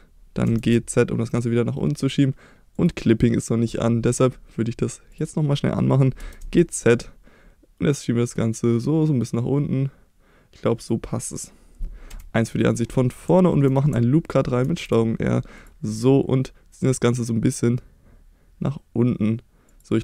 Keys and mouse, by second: 0.5 g, 0.7 z, 2.8 click, 5.2 click, 5.9 middle click, 6.2 g, 6.4 z, 10.8 click, 12.1 KP_1, 13.4 shift+middle click, 14.7 ctrl+r, 19.7 click.